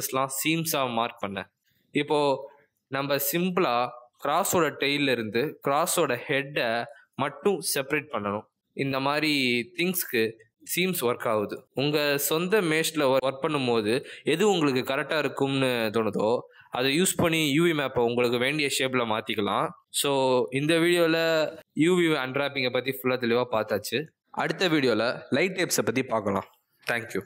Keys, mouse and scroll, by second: 0.1 middle click, 1.2 shift+click, 1.7 middle click, 4.2 a, 8.6 middle click, 10.5 click, 11.4 middle click, 14.3 a, 14.6 middle click.